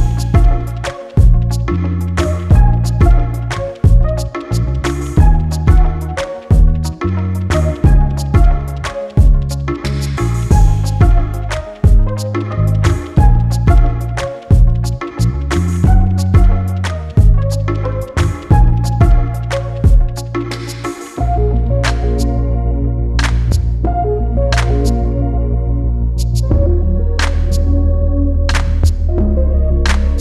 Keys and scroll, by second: 0.8 3, 7.1 ctrl+z, 8.3 4, 10.6 3, 13.6 ], 16.3 ], 17.2 ], 19.3 ctrl+z, 20.3 4.